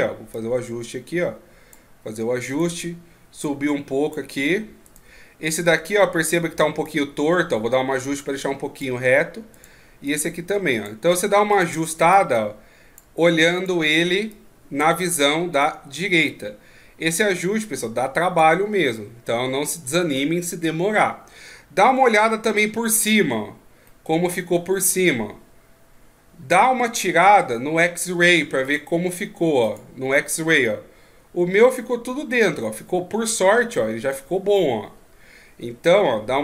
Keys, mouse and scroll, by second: 0.3 click, 2.5 right click, 3.4 click, 4.9 right click, 5.8 right click, 6.8 click, 9.5 right click, 10.1 click, 11.5 right click, 12.1 click, 13.6 right click, 14.3 click, 15.5 right click, 16.3 click, 22.1 KP_7, 23.8 middle click, 28.6 click, 29.6 click, 30.1 middle click, 34.1 middle click.